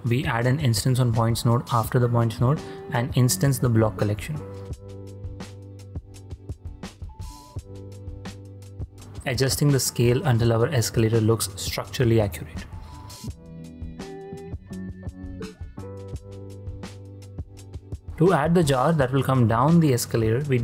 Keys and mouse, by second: 1.3 click, 2.7 drag, 4.6 click, 5.1 click, 5.5 click, 6.3-7.5 drag, 8.7-9.2 drag, 9.2 middle click, 9.5 shift+click, 9.9-11.1 drag, 9.9 g, 12.1 shift+space, 13.3-13.7 drag, 13.9-14.3 ctrl+drag, 14.7 shift+space, 15.4-17.0 shift+drag, 17.3-17.8 drag, 17.9 shift+space, 19.1 click, 19.6 shift+d.